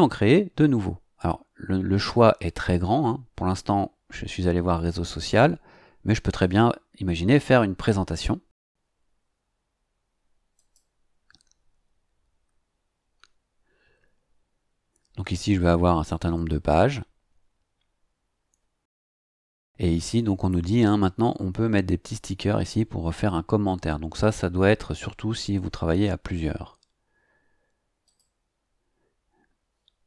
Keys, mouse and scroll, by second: 6.4 click, 10.5 click, 28.0 click.